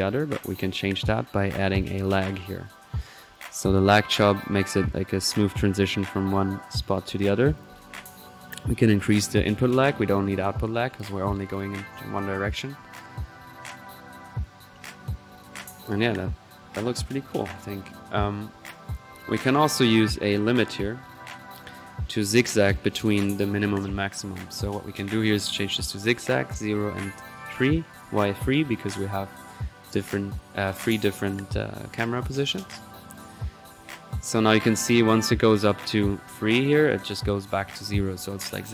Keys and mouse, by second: 0.8 click, 0.8 typing, 1.5 right drag, 1.8-3.1 drag, 2.9-3.6 typing, 3.3 drag, 3.9 drag, 6.0-6.5 drag, 6.9-7.2 drag, 8.2 click, 18.6 click, 19.6-20.0 right drag, 20.0-20.8 drag, 20.5-21.3 typing, 21.6-22.1 drag, 22.7 click, 24.6-25.9 drag, 26.0-26.5 drag, 27.0 click, 27.9-28.2 drag, 28.3 click, 32.2-33.6 drag, 33.7-35.2 drag, 35.4 click.